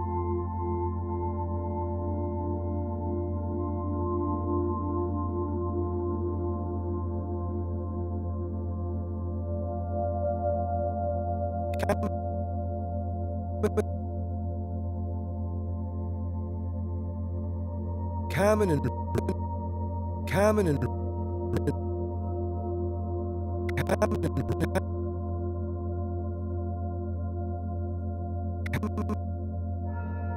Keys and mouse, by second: 1.0-3.6 drag, 5.6-7.6 drag, 7.7 g, 9.2 click, 10.2-14.8 drag, 14.8 s, 15.0 x, 16.5-17.6 drag, 17.4 space, 19.1 click, 19.4 space, 20.7 space, 21.5 click, 24.2-29.0 drag, 29.9-30.3 drag.